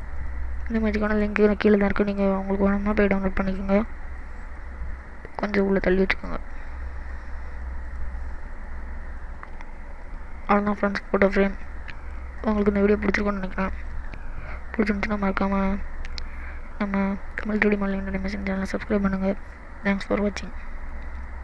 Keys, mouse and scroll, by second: 0.2 click, 0.6 middle click, 1.4-1.9 scroll up 5, 2.3 middle click, 3.2-3.9 scroll down 3, 3.9 click, 4.2 middle click, 5.3 click, 7.9 click, 8.3 middle click, 9.0 scroll down 3, 9.3 middle click, 10.4-10.9 scroll up 2, 11.1 middle click, 13.1-13.5 scroll down 1, 13.5 middle click.